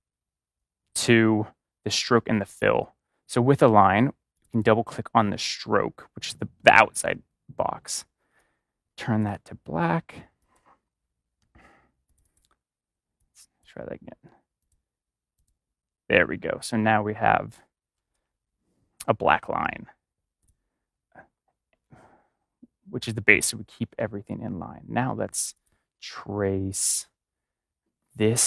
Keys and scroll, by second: 18.1 ctrl+shift+a.